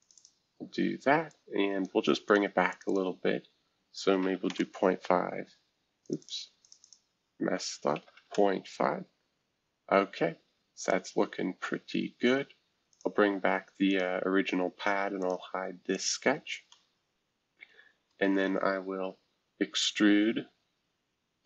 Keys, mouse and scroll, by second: 0.0 click, 0.1 click, 1.3 click, 2.2 click, 2.7 click, 2.8 click, 4.2-4.9 typing, 6.0 click, 6.2 click, 6.6 click, 6.8 click, 7.9 typing, 8.3 Return, 10.8-12.3 drag, 12.9-14.3 drag, 14.3-15.2 scroll up 1, 15.2 click, 15.9 click, 16.3-16.7 scroll up 1, 16.7-19.5 middle drag, 19.7 click.